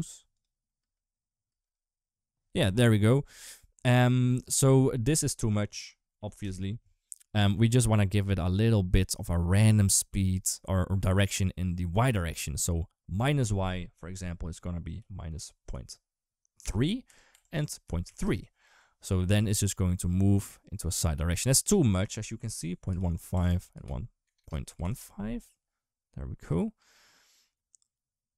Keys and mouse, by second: 0.1 click, 0.6 space, 1.3 space, 1.4 click, 3.7 click, 4.0 click, 5.1-6.2 drag, 13.0-18.0 drag, 17.1 Tab, 19.1 space, 20.7 space, 21.5-24.7 drag, 23.1 Tab, 23.3 Tab, 24.2 BackSpace, 26.3 click, 26.6 space.